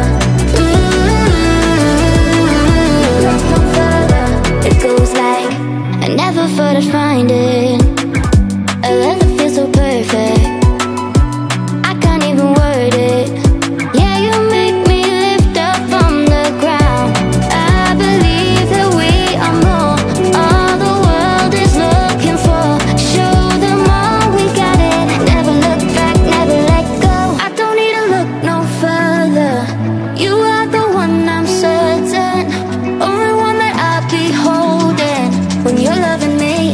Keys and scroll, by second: 25.2 Up, 26.0 Down, 27.2 Up, 33.7 Down, 35.0 Up, 35.7 Right.